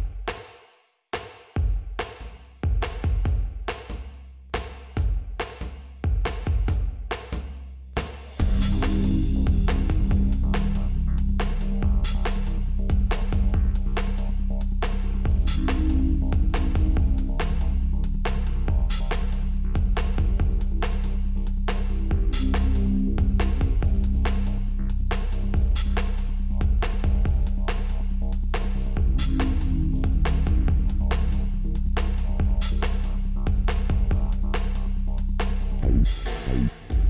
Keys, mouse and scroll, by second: 1.2-4.2 middle drag, 4.2-5.9 right drag, 5.9-8.0 middle drag, 10.2-12.2 drag, 18.3-20.2 drag, 22.9-24.8 drag, 32.8-34.7 middle drag, 35.9-37.0 drag.